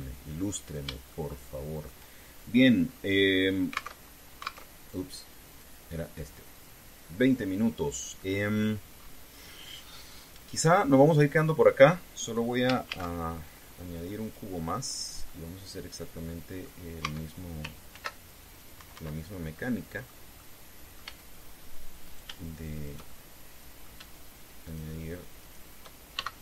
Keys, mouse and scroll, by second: 0.0 KP_3, 1.1-1.5 scroll up 2, 1.9 shift+middle click, 3.6 scroll down 2, 4.6 alt+Tab, 5.4 alt+Tab, 6.2 click, 7.3 click, 9.0 scroll down 2, 9.7-10.1 scroll up 2, 11.9-12.2 scroll down 2, 13.6 shift+a, 15.0 click, 16.0-17.5 middle drag, 17.7 Tab, 18.7 ctrl+r, 19.3 click, 19.5 Escape, 20.3 click, 21.1 click, 21.8 a, 22.8 shift+right click, 23.5 shift+right click, 23.8 shift+middle click, 25.3 shift+right click, 26.1 shift+right click.